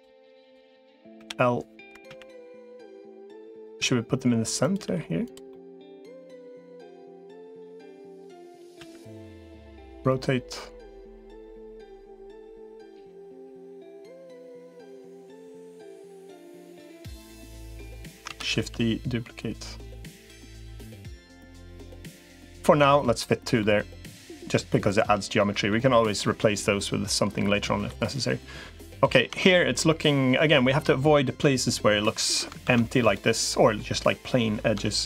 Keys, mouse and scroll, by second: 0.2 click, 1.0 l, 1.8 KP_1, 3.0 r, 3.6 g, 4.6 r, 5.3 middle click, 7.3 middle click, 8.6 KP_1, 9.8 r, 11.4 g, 14.6-15.7 middle drag, 16.2-17.8 drag, 18.2 shift+d, 21.1-22.3 middle drag, 22.6 Tab, 23.4-25.5 middle drag, 26.0-27.6 middle drag, 29.2 Tab, 32.6 ctrl+s.